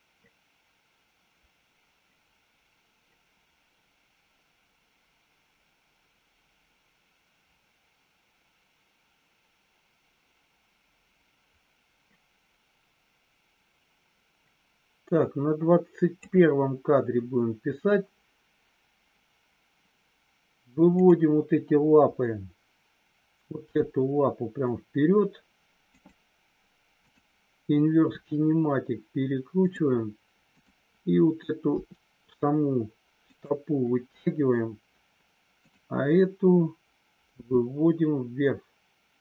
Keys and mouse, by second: 23.6 g, 25.8 click, 27.0 click, 28.0 r, 31.6 r, 37.4 g.